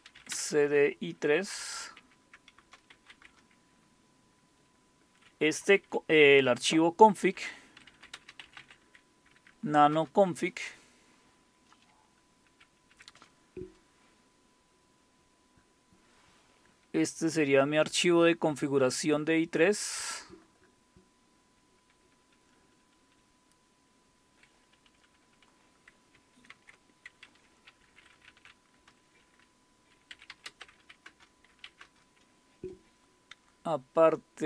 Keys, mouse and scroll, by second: 0.0-3.6 typing, 7.2-9.1 typing, 9.3 Tab, 9.9 Return, 12.5 ctrl+-, 12.9 ctrl+-, 14.7-17.5 scroll down 1, 18.6-22.0 scroll down 1, 21.4 Page_Down, 21.8-22.2 Page_Down, 22.0 Page_Down, 22.6 Page_Down, 22.6 Page_Down, 22.8 Page_Down, 23.0 Page_Down, 23.2-24.4 Page_Down, 24.7-25.5 typing, 26.5 ctrl+x, 27.5-28.8 typing, 29.9-32.5 typing.